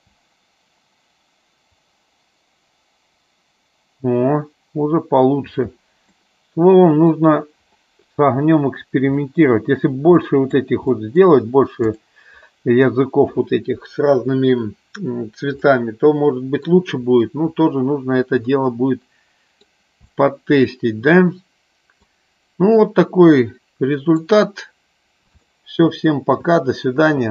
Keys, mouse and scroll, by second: 5.6 space, 6.1 middle click, 9.1 middle click, 10.1 middle click, 10.8 middle click, 11.8 click, 15.6 middle click, 18.7 middle click, 20.1-22.1 middle drag, 23.3 middle click, 25.5 shift+middle click.